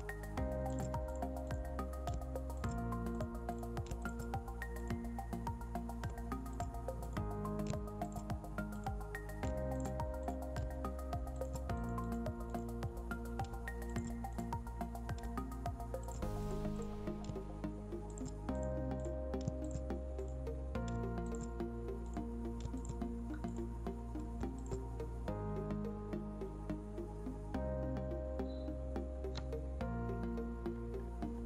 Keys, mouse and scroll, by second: 0.6 alt+click, 1.5-2.5 scroll down 2, 2.5 alt+click, 3.8 alt+click, 5.0-5.3 scroll up 1, 5.9 alt+scroll down 1, 6.4 alt+click, 9.1-9.7 scroll up 2, 9.7 alt+click, 13.0-13.8 scroll down 2, 13.8 alt+click, 14.7-15.6 scroll down 2, 15.9 alt+click, 16.9-18.0 scroll down 2, 18.0 alt+click, 19.3 alt+click, 20.4-21.1 scroll down 2, 21.1 alt+click, 25.7 scroll up 1, 27.4 scroll up 1, 27.9-30.4 scroll down 1, 31.3-31.4 scroll down 1.